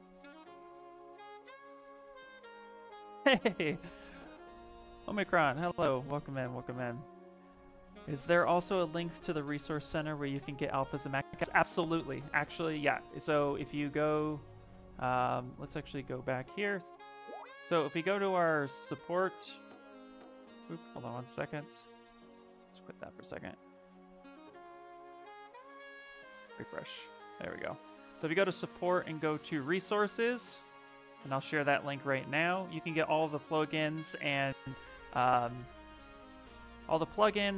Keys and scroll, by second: 12.5 alt+Tab, 25.1 Escape, 31.8 ctrl+c, 33.5 ctrl+v, 34.2 Return.